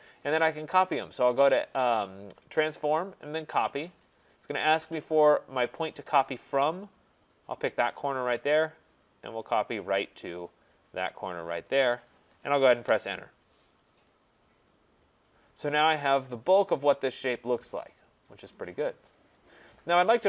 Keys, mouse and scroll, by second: 1.5 click, 3.8 click, 7.9 click, 9.9 click, 12.1 right click, 12.7 Return, 13.8 click, 15.8 right click, 19.3 right click, 19.8-20.2 scroll.